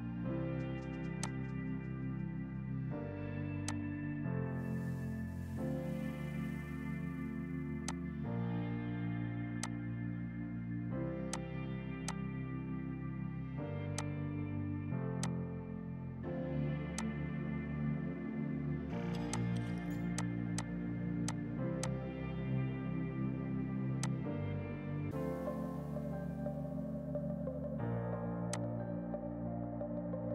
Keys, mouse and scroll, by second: 1.9 F5, 3.7 click, 7.9 click, 8.4 ctrl+z, 9.7 click, 15.6 space, 17.0 click, 19.3 click, 24.6 4, 25.1 Return, 26.7 right click, 27.4 F3, 28.2 F2, 28.5 click, 28.9 right click.